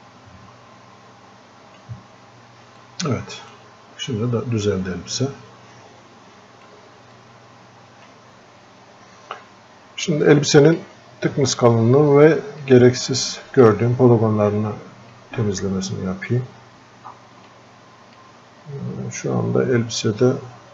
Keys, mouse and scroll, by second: 10.3-20.7 drag.